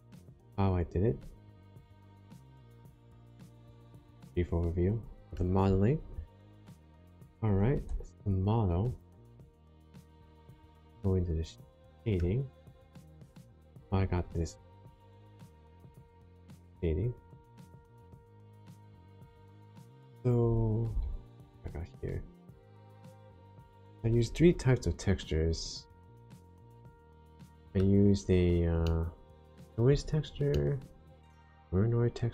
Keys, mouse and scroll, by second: 8.8 click, 10.2 middle click, 12.5 shift+middle click.